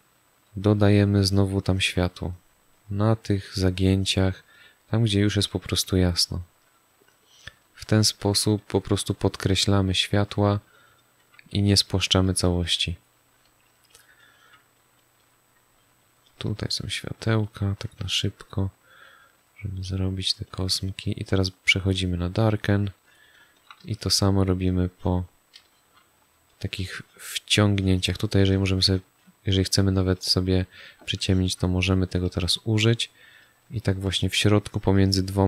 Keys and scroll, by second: 5.3 space, 10.8 space, 14.0 space, 18.1 space, 25.5 space, 30.4 space.